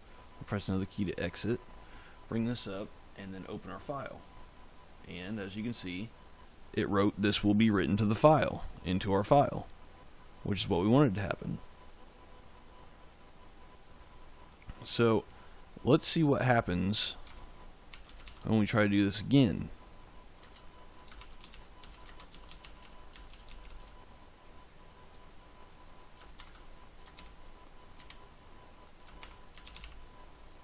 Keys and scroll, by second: 17.2 Return, 17.6-18.7 typing, 20.3-24.2 typing, 26.3-30.2 typing.